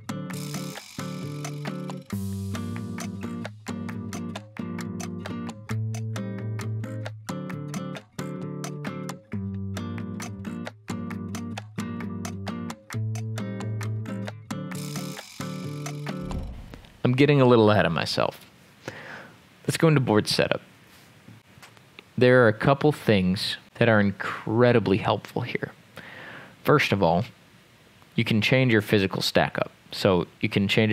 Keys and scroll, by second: 0.0-10.9 typing, 9.2 Escape, 11.3 Escape, 12.8 m, 12.9 Escape, 13.3 m, 14.0 x, 14.6 Escape, 14.8 m, 15.8 x, 16.0 Escape, 16.1 ctrl+z, 17.0 Escape, 17.0 Delete, 17.0 ctrl+s.